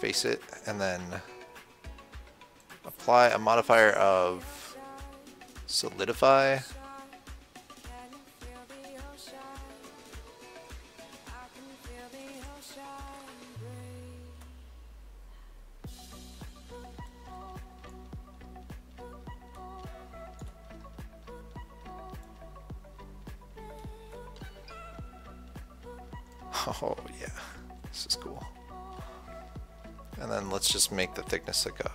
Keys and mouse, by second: 0.2 f, 2.9-6.1 drag, 8.8 KP_1, 12.7 KP_7, 17.5 Tab, 21.2-22.5 middle drag, 22.5-24.8 drag, 27.7 KP_7, 28.1 KP_1, 28.7 KP_3, 30.8 click.